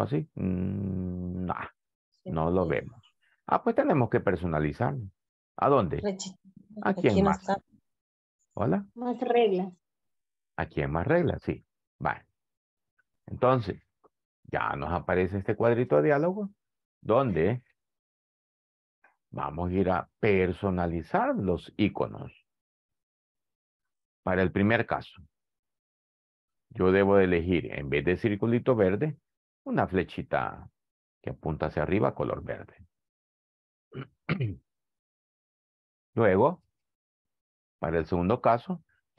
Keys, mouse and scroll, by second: 36.4 click, 36.8 click, 37.8 click.